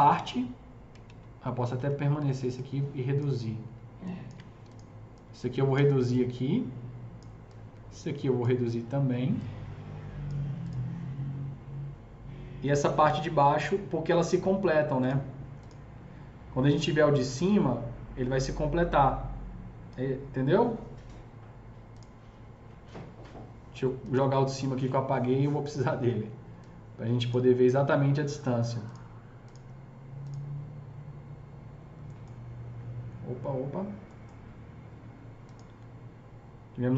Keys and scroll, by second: 0.9 ctrl+z, 1.3 ctrl+z, 1.6 typing, 5.6 s, 26.1 s.